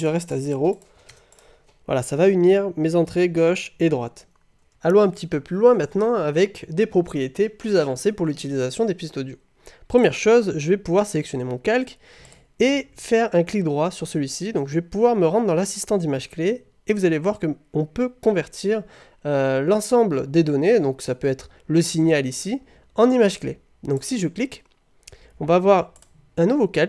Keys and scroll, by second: 1.1 0.